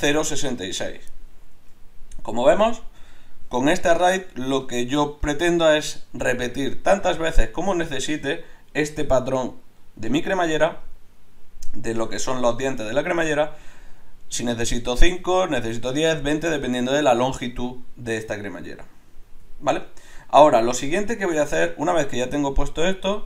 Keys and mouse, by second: 2.2-23.2 middle drag.